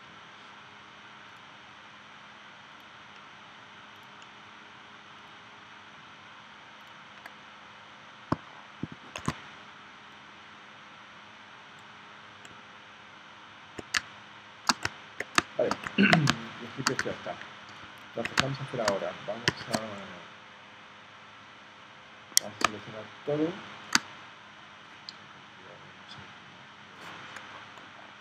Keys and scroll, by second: 9.1 shift+c, 14.0 space, 15.4 space, 16.3 space, 17.0 v, 18.4 space, 19.5 v, 22.6 space.